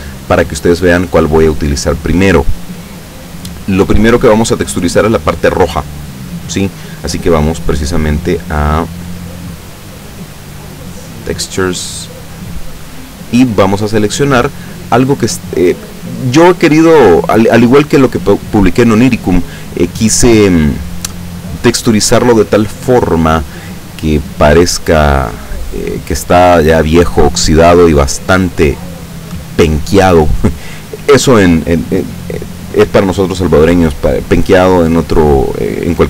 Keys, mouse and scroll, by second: 4.0 Escape, 7.7 click, 9.2 click, 11.0 click, 12.7 click, 16.8 click.